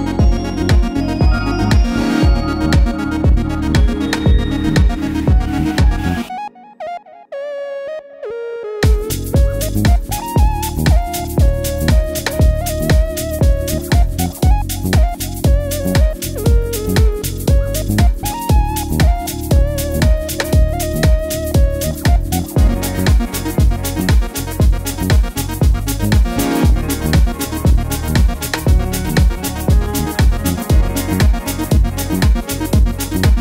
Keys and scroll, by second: 10.5 BackSpace, 25.4 super+c, 25.7 super+d.